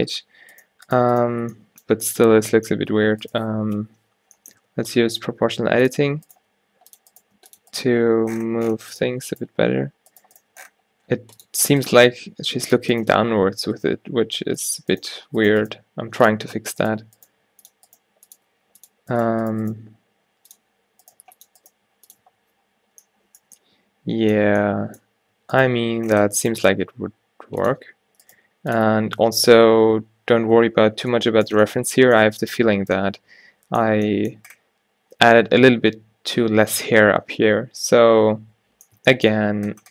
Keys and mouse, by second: 0.0 alt+h, 3.8 o, 4.7 g, 6.4 g, 7.3 g, 7.8 g, 9.5 g, 10.4 g, 12.0 g, 13.8 g, 15.1 g, 15.8 g, 17.3-19.7 typing, 21.2 g, 21.7 g, 22.3 Tab, 25.5 Tab, 26.8 g, 28.4 g, 29.0 Tab, 29.6 a, 31.2-31.5 middle drag, 31.8 middle drag, 38.4-39.2 middle drag, 39.7 middle click.